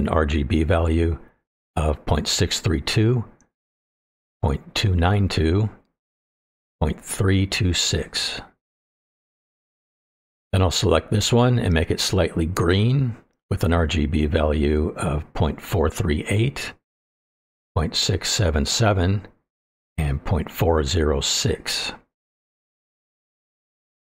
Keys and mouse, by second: 0.4 click, 11.5 click, 19.7 KP_7.